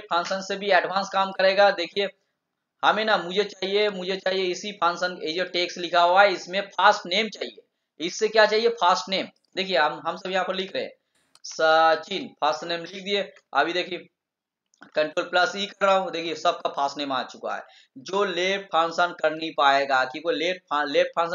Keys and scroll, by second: 14.8 ctrl+e.